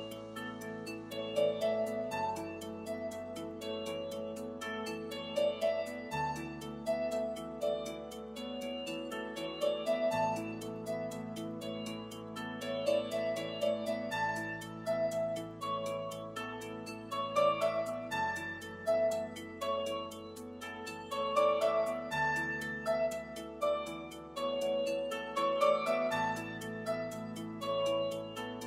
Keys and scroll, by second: 15.0 i.